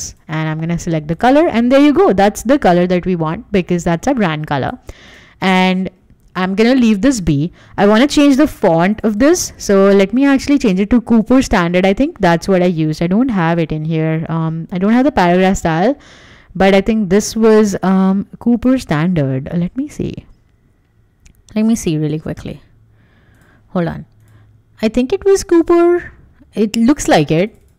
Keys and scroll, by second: 0.5 Escape.